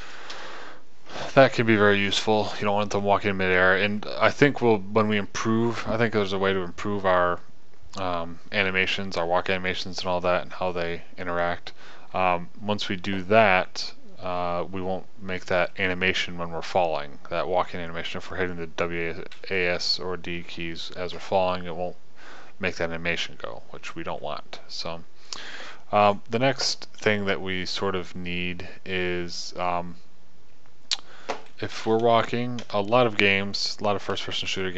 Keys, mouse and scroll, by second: 0.7 KP_0, 33.1 KP_0, 34.6 p.